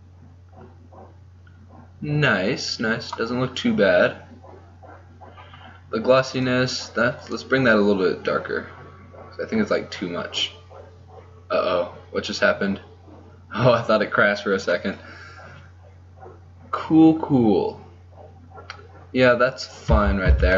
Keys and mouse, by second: 3.2-9.7 middle drag, 19.2 middle click, 19.5 z, 20.3 z.